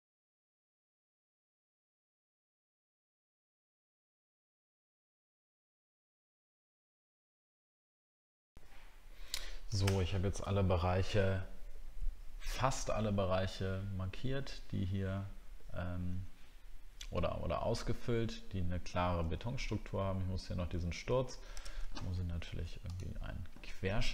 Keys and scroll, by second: 3.9 alt+scroll down 1, 6.9 alt+scroll down 1, 21.7 alt+Tab, 24.0 alt+Tab.